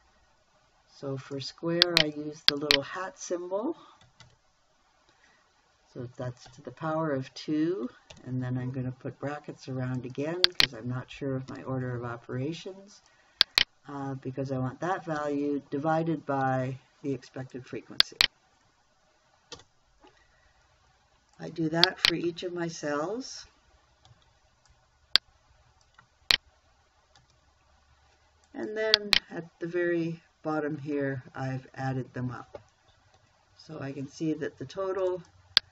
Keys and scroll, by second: 4.7 shift+6, 6.9 2, 8.6 shift+0, 11.9 shift+9, 15.6 /, 20.0 Return, 24.6 ctrl+c, 27.6 ctrl+v, 33.6 Escape.